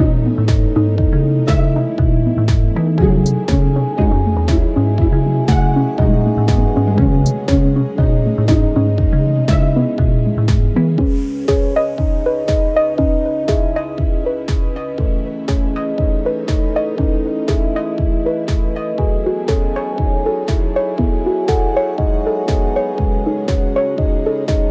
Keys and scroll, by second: 14.0 alt+z, 16.6 alt+z, 18.5 alt+z, 22.1 ctrl+i, 24.4 alt+z.